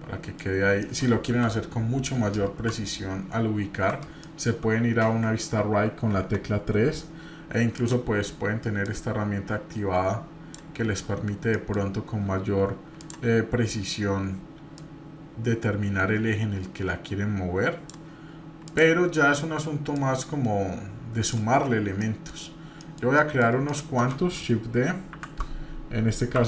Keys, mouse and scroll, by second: 0.6 scroll up 1, 0.8 middle click, 1.2 KP_1, 2.5 KP_3, 3.1-3.7 scroll up 2, 4.2-4.5 shift+middle drag, 7.8 click, 8.8-10.5 drag, 10.8-11.3 scroll up 1, 11.5 shift+middle click, 12.9 click, 14.8-17.9 drag, 18.6 click, 19.9-21.3 drag, 21.6-22.8 scroll down 4, 22.0 middle drag, 22.8 middle drag, 23.2 middle click, 23.4 scroll down 2, 23.7 shift+middle drag, 25.1 shift+d.